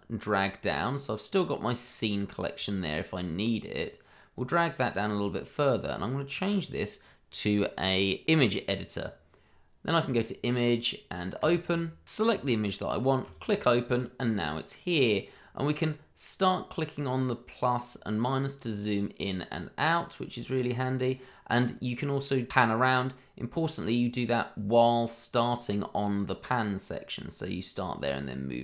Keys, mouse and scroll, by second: 8.5 click, 12.3 click, 15.8 click.